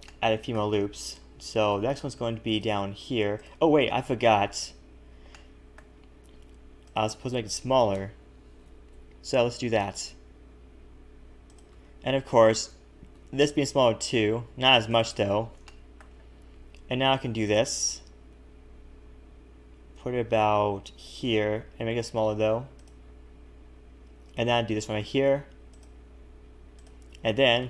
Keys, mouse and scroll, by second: 0.1 shift+middle click, 1.7 ctrl+r, 4.6 ctrl+z, 5.3 middle click, 6.8 click, 7.6 shift+click, 8.6 ctrl+KP_Add, 8.9 KP_1, 9.7 s, 11.8 a, 12.4 alt+shift+click, 13.1 s, 15.1 a, 15.3 a, 15.6 shift+middle click, 16.8 ctrl+r, 21.7 s, 24.9 ctrl+r.